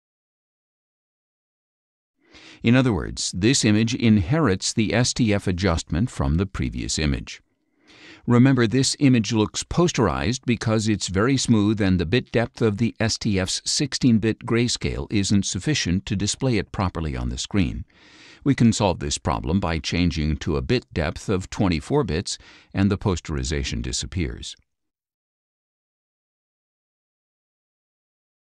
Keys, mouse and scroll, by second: 3.4 click, 6.2 middle click, 6.2 scroll up 1, 8.7 click, 23.7 click, 25.4 click, 26.4 click.